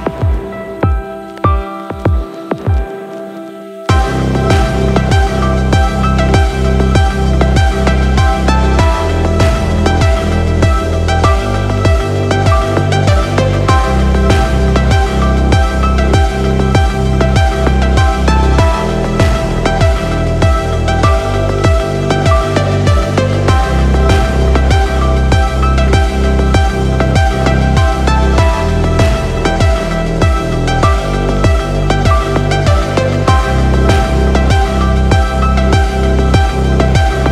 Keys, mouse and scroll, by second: 3.8 click, 5.0 click, 5.2-6.7 drag, 9.3-9.8 middle drag, 10.0-10.5 scroll up 2, 10.5-10.8 middle drag, 11.9 click, 16.7 scroll down 3, 17.3-19.4 middle drag, 20.8 shift+click, 22.4 ctrl+p, 25.0 click, 25.6 click, 27.1 click, 28.3 click, 30.7 right click, 31.5-32.1 scroll up 3, 32.3-32.9 middle drag, 34.3 click, 34.7 click, 36.1-37.1 middle drag.